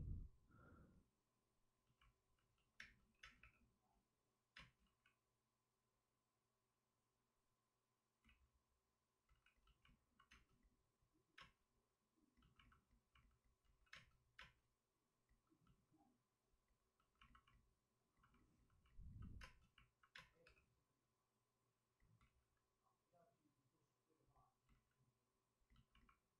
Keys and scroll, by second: 2.7 Return, 2.7 space, 3.1 Return, 3.1 3, 3.3 space, 3.3 3, 4.5 space, 4.7 ctrl+z, 8.9 ctrl+z, 9.2 ctrl+z, 10.5 space, 11.3 space, 13.6 ctrl+z, 13.9 space, 20.1 space, 20.4 3, 22.1 ctrl+z, 25.1 ctrl+z, 26.1 ctrl+z.